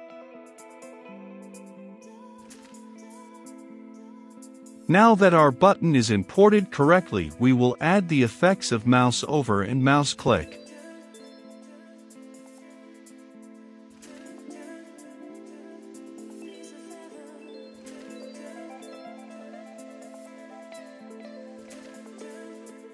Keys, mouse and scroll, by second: 0.9-2.6 middle drag, 2.6-14.7 drag, 16.1-19.6 drag, 20.8 click, 21.5 Return, 22.5 shift+q, 22.7 ctrl+space.